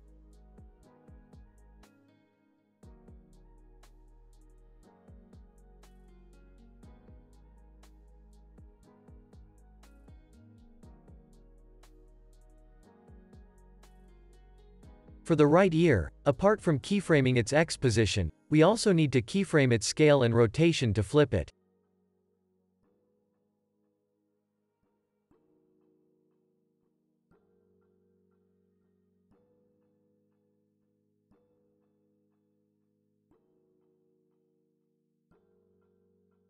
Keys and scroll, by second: 0.2 super+=, 1.9 Left, 2.6 Right, 5.5 super+-, 9.9 p, 15.7 x, 23.2 shift+r, 24.7 shift+s, 27.4 z, 29.4 x, 30.6 Left, 30.8 -, 31.0 Return, 35.2 z, 36.1 x.